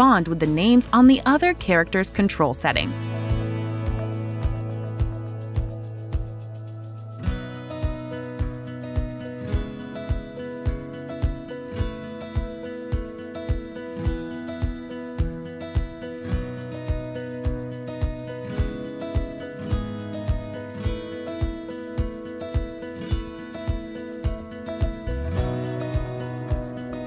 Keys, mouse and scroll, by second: 1.5 click, 1.9 click, 4.2 click, 5.3 click, 6.0 click, 8.2 ctrl+click, 12.5 click, 14.2 ctrl+click, 15.5 click, 17.2 click, 19.9 click, 20.6 l.